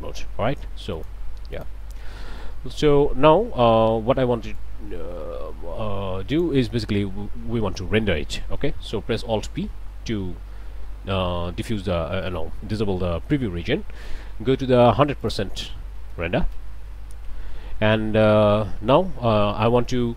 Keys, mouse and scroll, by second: 1.0 click, 1.6 click, 2.1 click, 4.6-6.6 drag, 8.2 middle click, 8.6 middle click, 9.7 alt+p, 15.2 click, 15.8 1, 16.1 0, 16.5 Return, 18.1 middle click.